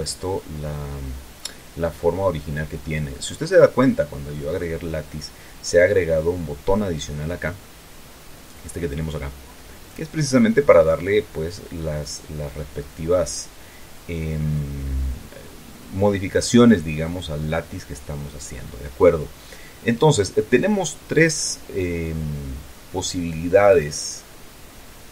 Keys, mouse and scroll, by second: 10.2 click, 22.4-24.3 drag.